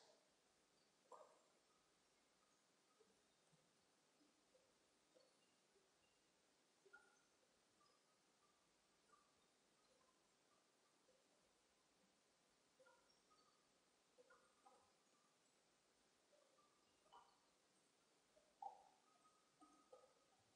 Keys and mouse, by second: 1.9 Tab, 3.4 z, 5.8 Tab, 6.2 middle click, 8.7 Tab, 11.7 z, 12.3 b, 15.0-16.8 right drag, 15.7 click, 18.1 b, 20.1-20.5 drag.